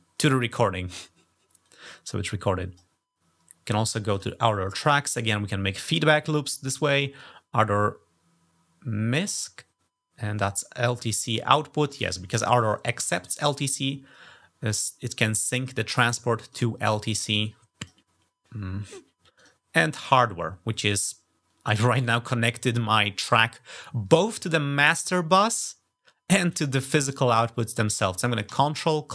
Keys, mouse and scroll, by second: 1.4-2.6 drag, 3.9 click, 6.7 click, 15.8 click, 17.2 click, 19.2 click.